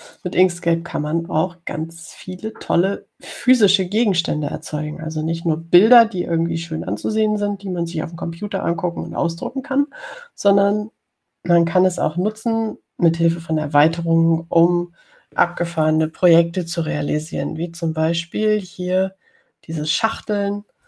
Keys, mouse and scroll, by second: 19.1 ctrl+scroll up 2, 19.7 ctrl+scroll up 2.